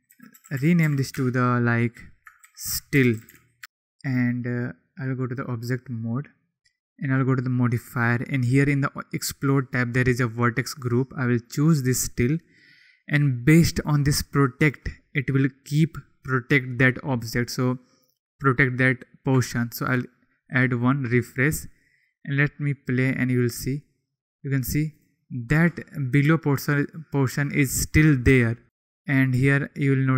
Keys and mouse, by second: 3.6 BackSpace, 4.9-5.5 drag, 7.0 click, 10.8 click, 14.7-20.0 drag, 20.7 click, 22.2-25.1 drag, 28.6 click, 29.9 click.